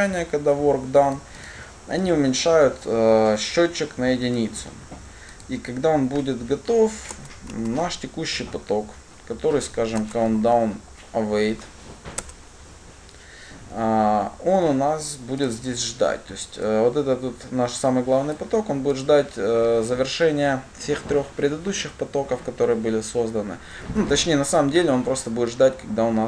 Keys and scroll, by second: 10.4 Return.